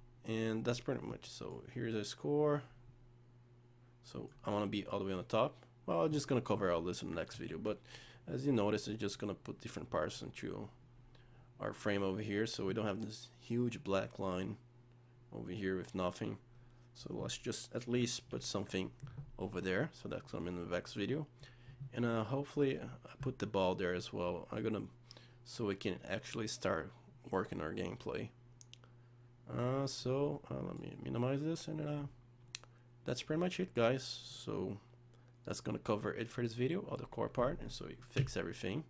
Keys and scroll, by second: 7.4 z, 18.3 z.